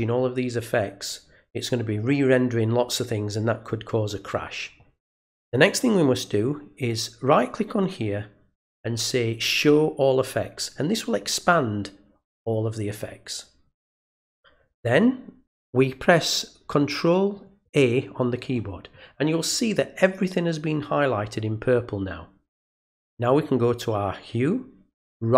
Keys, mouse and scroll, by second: 6.7 right click, 9.5 click.